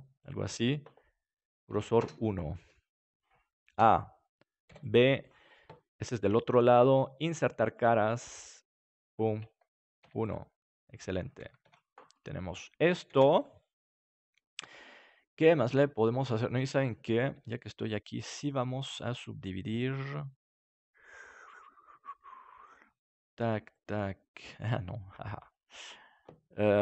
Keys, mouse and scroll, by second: 1.3-3.7 drag, 3.7 a, 4.6 b, 7.6-11.6 drag, 11.6 Tab, 12.1-14.1 middle drag, 13.0 ctrl+s, 17.3 Tab, 22.6-26.8 right drag.